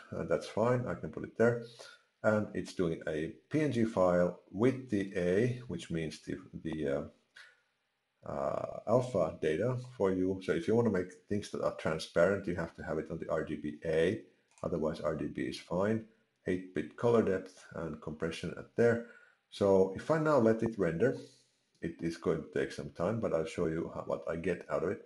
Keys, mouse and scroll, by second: 14.5 click.